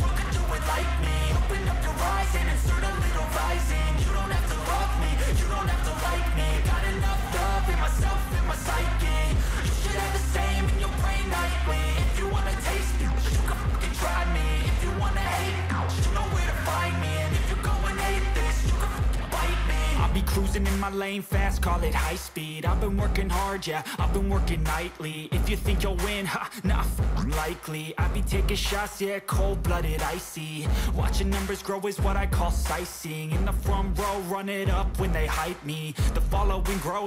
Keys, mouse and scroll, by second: 3.9 ctrl+j, 5.8 double click, 9.8 ctrl+a, 10.9-12.2 typing, 13.4-18.6 typing, 20.4 BackSpace, 27.6 ctrl+-, 28.0 ctrl+-, 28.3 ctrl+-, 28.6 ctrl+-, 29.2 ctrl+=, 29.5 ctrl+-.